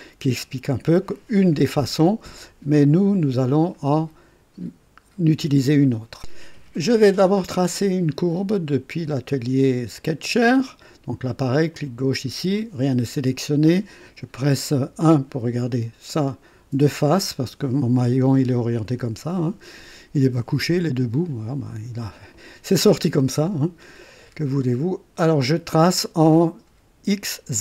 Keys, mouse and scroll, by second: 3.1 click, 6.2 click, 10.1 click, 11.7 click, 14.7 KP_1, 16.1 right click.